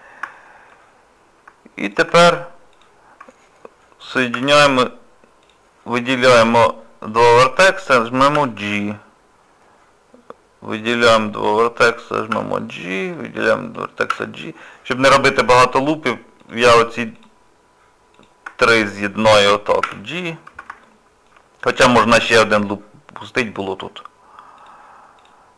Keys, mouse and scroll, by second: 0.3 shift+middle click, 1.8 shift+click, 4.3 j, 5.4 click, 6.3 click, 8.3 j, 11.1 click, 12.3 j, 13.1 click, 14.1 j, 16.4 click, 17.2 shift+click, 19.8 j, 20.8 shift+middle click, 23.6 click, 24.6 shift+click.